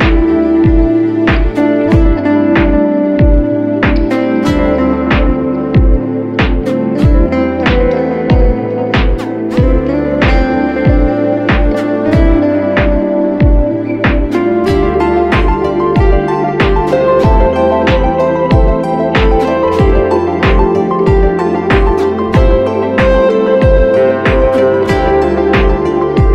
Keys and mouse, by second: 0.4-4.1 ctrl+middle drag, 4.1-7.8 drag, 11.1-15.0 drag, 24.6 click, 25.8 click.